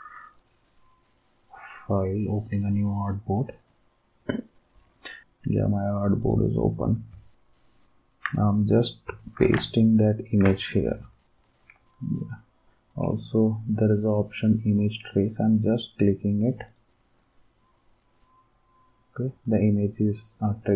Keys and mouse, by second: 9.4 ctrl+v.